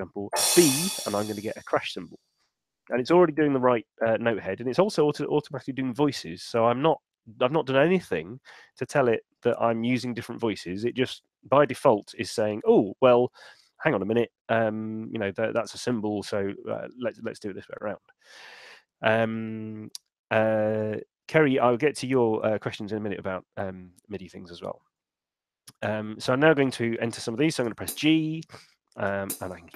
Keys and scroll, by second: 0.1 b, 26.0 5, 27.8 g.